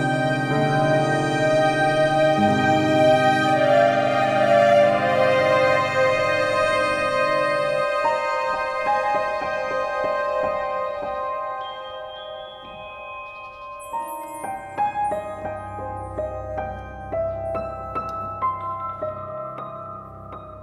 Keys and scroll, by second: 18.9 Left, 19.5 Up.